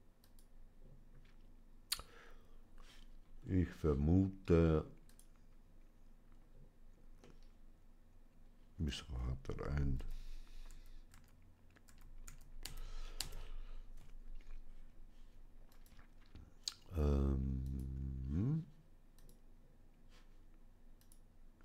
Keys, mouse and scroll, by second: 0.1-1.1 drag, 3.2-4.5 scroll down 1, 4.5 scroll down 1, 4.9-7.0 drag, 7.1-9.5 middle drag, 9.8 ctrl+z, 10.6 ctrl+z, 15.5 click, 17.5 click.